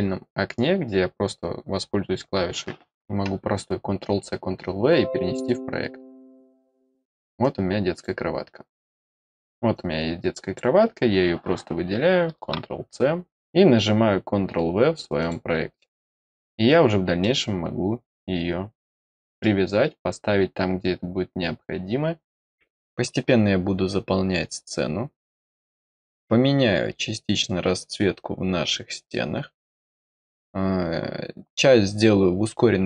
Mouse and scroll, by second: 6.6 click, 7.3 click, 9.7-10.5 drag, 15.1 click, 15.7 middle click, 16.3 middle click, 17.1-19.3 middle drag.